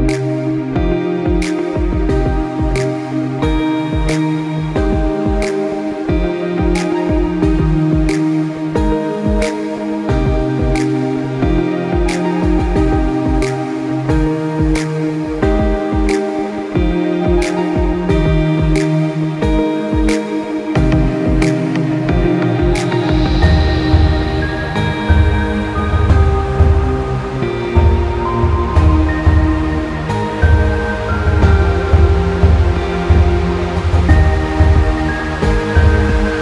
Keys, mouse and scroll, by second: 0.6 click, 1.8 Delete, 2.4 click, 5.5 click, 8.4 shift+Num_Lock, 10.7 click, 12.4 click, 13.7 click, 17.3 click, 18.2 click, 21.6 click, 22.8 click, 26.2 click.